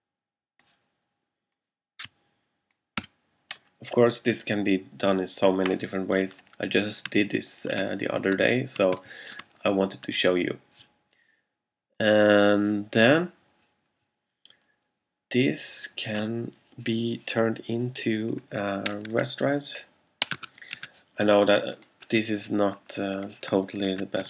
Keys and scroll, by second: 3.1 Return, 7.9 alt+space, 9.0 alt+space, 20.5 super+a, 20.8 super+c.